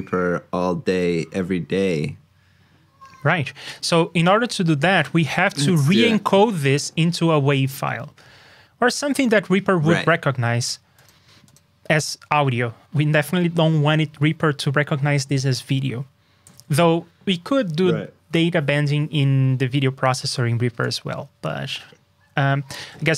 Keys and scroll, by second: 16.4 super+b, 22.8 super+Tab.